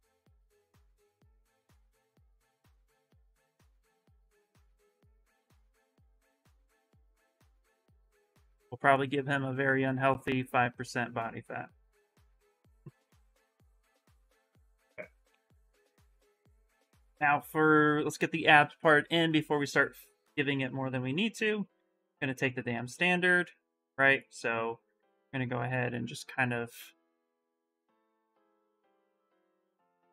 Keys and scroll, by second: 15.0-17.8 typing, 21.1 shift+space, 22.0 shift+s, 28.1 ctrl+shift+z, 28.3 ctrl+shift+z.